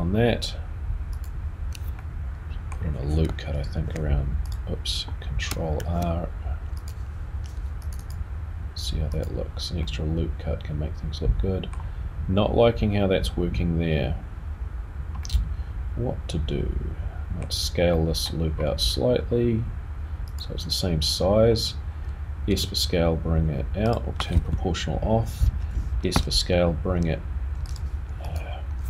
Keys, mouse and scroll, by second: 1.2 click, 2.0 middle click, 3.8 r, 6.1 ctrl+r, 8.0 click, 9.3 click, 9.8 middle click, 15.2 middle click, 17.9 middle click, 18.4-20.4 scroll down 2, 20.4 click, 21.1-21.6 scroll up 4, 22.5 s, 25.0 o, 26.0 a, 27.6 right click, 28.2 click.